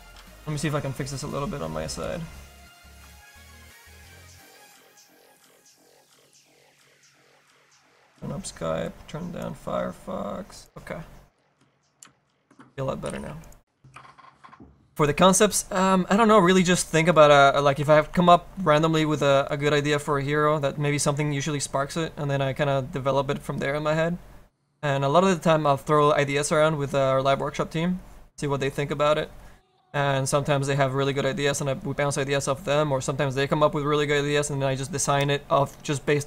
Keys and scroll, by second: 31.6 alt+a.